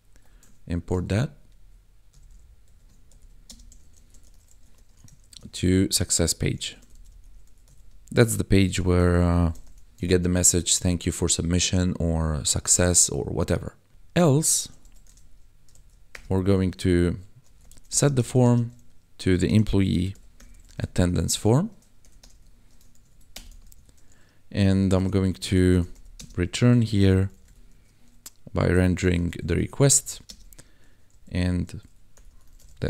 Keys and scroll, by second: 1.0 ctrl+Right, 3.1-7.4 typing, 8.6-9.6 typing, 10.1 ctrl+s, 10.3 Right, 12.5 Right, 13.9 Return, 14.3 e, 14.8 s, 15.0 e, 15.7 shift+;, 16.1 Return, 17.4-20.3 typing, 21.0 Tab, 21.5 shift+0, 22.0 BackSpace, 22.3 shift+9, 22.9 ctrl+s, 23.1 Right, 23.3 Return, 23.6 ctrl+s, 24.9-27.7 typing, 28.7-32.8 typing.